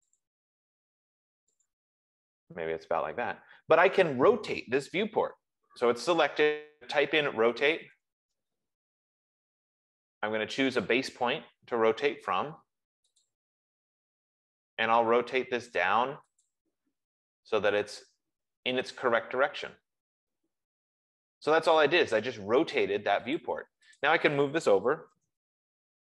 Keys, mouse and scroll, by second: 0.5 click, 2.0 click, 7.4-9.2 typing, 13.6-16.2 drag, 16.7 click, 23.8 click, 24.4 click, 24.9-26.1 typing.